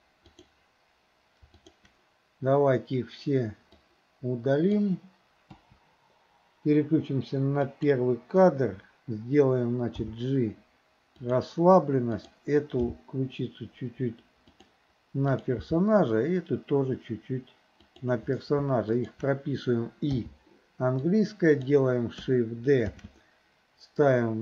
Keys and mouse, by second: 0.3 click, 1.6 shift+click, 3.8-4.9 drag, 5.6 Delete, 7.7 click, 10.1 g, 12.1 click, 12.8 g, 15.4 click, 15.6 g, 19.1 shift+click, 20.2 i, 21.1-21.7 drag, 23.0 shift+d.